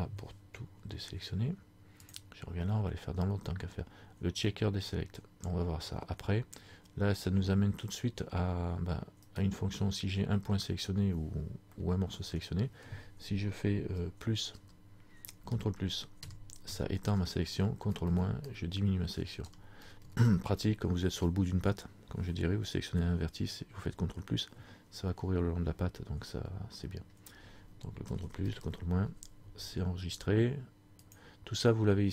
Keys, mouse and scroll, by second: 2.1 click, 9.5 right click, 11.9 middle click, 14.7 KP_Add, 15.5 ctrl+KP_Add, 17.9 ctrl+KP_Subtract, 18.3 ctrl+KP_Subtract, 19.3 ctrl+KP_Add, 20.0 ctrl+KP_Subtract, 28.2 ctrl+KP_Add, 28.5 ctrl+KP_Add, 28.5 ctrl+KP_Subtract, 31.1 click.